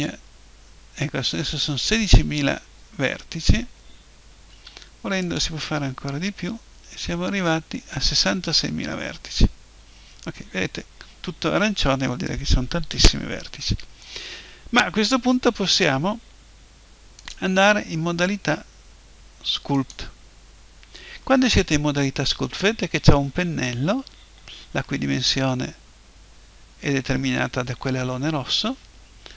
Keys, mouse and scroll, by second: 4.5 w, 9.0-14.1 drag, 25.4-29.3 middle drag.